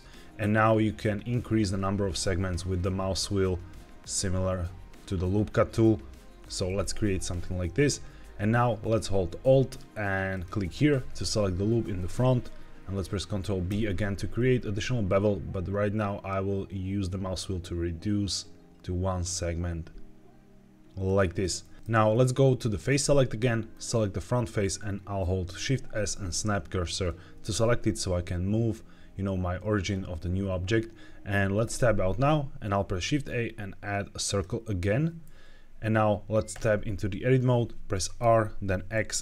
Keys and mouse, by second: 6.3 click, 6.7 middle click, 7.7 middle click, 10.2 alt+click, 13.6 ctrl+b, 20.9 click, 21.5 middle click, 23.6 click, 25.5 shift+s, 31.5 Tab, 32.5 shift+a, 36.4 Tab, 38.1 r, 38.8 x.